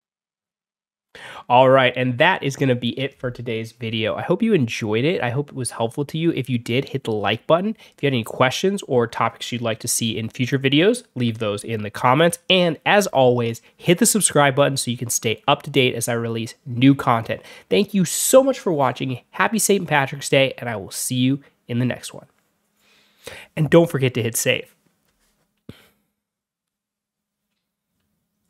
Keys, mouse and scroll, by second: 28.4 click.